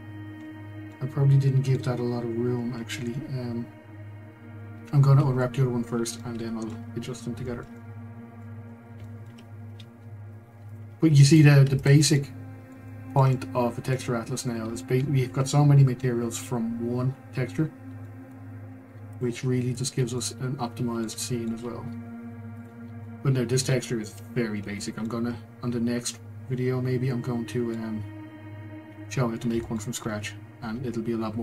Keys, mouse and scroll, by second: 5.2 scroll, 6.2 middle click, 6.8 scroll, 7.4-8.6 shift+middle drag, 8.6 scroll, 9.0 shift+middle click, 9.7-10.7 scroll, 10.7 click, 11.3 click, 11.8 shift+click, 12.1-17.7 middle drag, 17.7-18.0 scroll, 18.0 shift+middle click, 18.4-19.2 scroll, 19.2 ctrl+click, 19.8 ctrl+click, 20.2-22.6 middle drag, 22.6 ctrl+click, 23.0-28.2 middle drag, 28.2 scroll, 29.6 shift+middle click, 29.9-31.4 scroll.